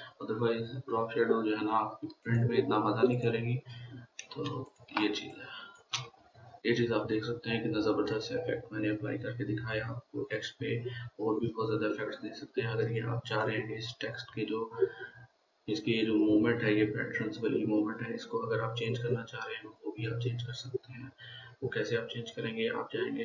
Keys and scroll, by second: 4.9 ctrl+space, 5.4 ctrl+space, 6.0-6.4 ctrl+space.